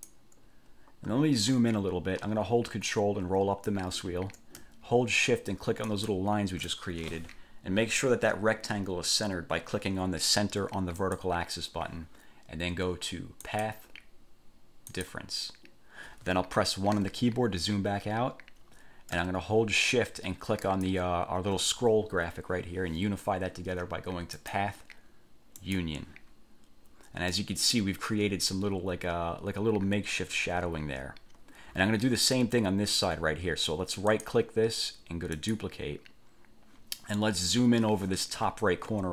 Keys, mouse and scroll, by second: 2.9-3.6 ctrl+scroll up 2, 6.0 shift+click, 11.2 click, 13.6 click, 15.1 click, 17.2 1, 20.8 shift+click, 24.6 click, 25.8 click, 27.5 middle click, 34.3 click, 35.5 click.